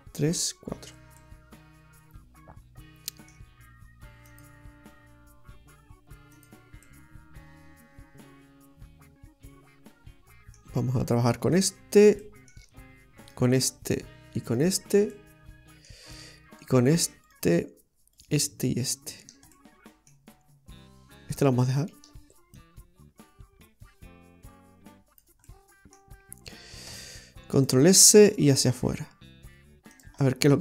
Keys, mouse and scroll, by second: 1.2 middle click, 4.3 click, 6.4 click, 6.9 middle click, 11.2 right click, 11.6 shift+right click, 12.3 middle click, 13.3 shift+right click, 15.2 middle click, 17.3 shift+right click, 19.6 middle click, 21.8 shift+right click, 22.6 click, 25.5 middle click, 27.0 shift+s, 28.1 s, 30.3 middle click.